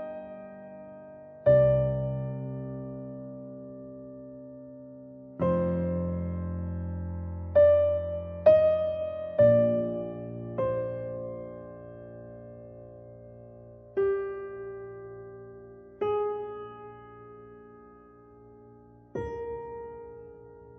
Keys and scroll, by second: 15.3 ctrl+alt+shift+e.